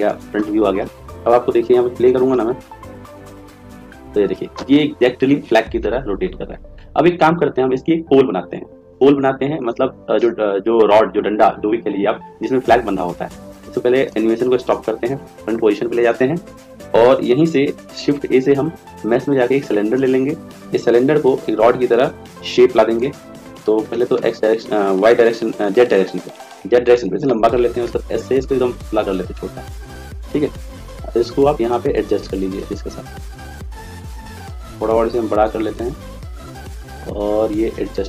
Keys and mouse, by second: 2.3 click, 3.8-8.0 middle drag, 14.1 click, 17.9 shift+a, 23.8 s, 27.8 s, 31.1-33.9 drag, 34.8 s, 37.2 click.